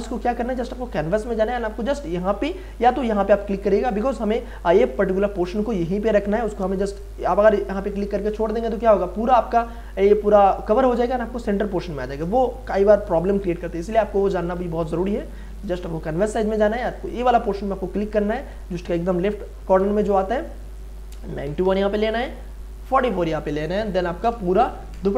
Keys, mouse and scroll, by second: 14.5 ctrl+alt+z, 15.5 ctrl+alt+c.